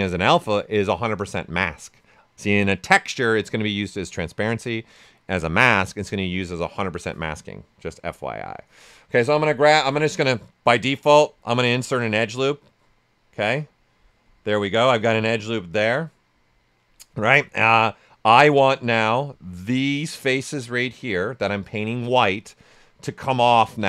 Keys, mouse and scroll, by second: 10.6-17.4 drag, 17.4-19.6 right drag, 19.6-23.8 alt+drag.